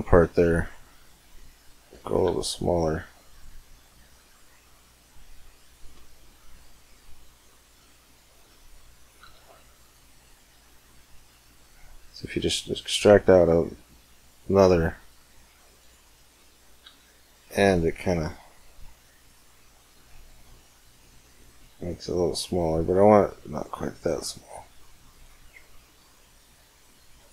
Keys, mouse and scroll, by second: 0.6 Tab, 1.6-3.5 right drag, 2.0 g, 5.9-6.5 middle drag, 7.5 e, 9.0 g, 15.9-17.8 middle drag, 16.6 g, 18.3-20.0 middle drag, 23.3-25.0 right drag, 24.0 g, 25.3-27.1 right drag.